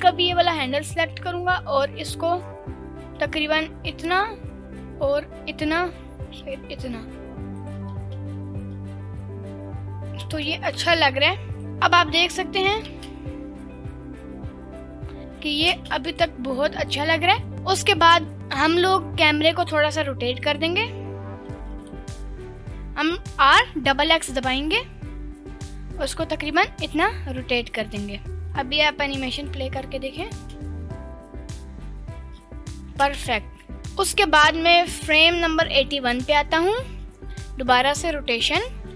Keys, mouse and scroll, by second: 0.5 click, 0.8 g, 7.6 ctrl+click, 8.0 space, 10.3 space, 10.8 g, 11.6-12.8 drag, 11.6 scroll down 3, 12.9 space, 15.8 space, 16.1-17.5 drag, 19.6 click, 20.4 click, 21.6 r, 21.6 x, 21.8 x, 27.8 click, 28.6-29.6 drag, 30.4 space, 35.2 click, 37.3 i.